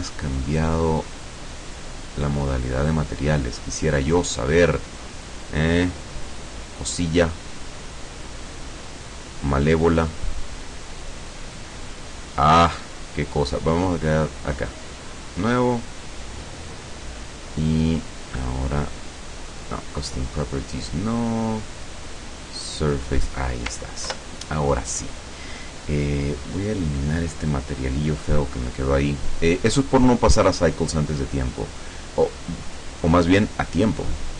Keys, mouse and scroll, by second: 0.3 click, 1.8 click, 4.4 click, 5.2 click, 6.5 click, 7.6 click, 8.6 click, 9.0 click, 9.5 click, 10.2 click, 10.9 click, 11.8-12.2 scroll up 1, 12.2-12.6 scroll down 1, 12.9 scroll up 1, 14.0 click, 15.3 click, 18.4 click, 19.8 click, 20.5 click, 21.8 click, 24.2 ctrl+Left, 26.9 click, 27.7 click, 30.0-30.8 drag, 31.6-34.3 drag.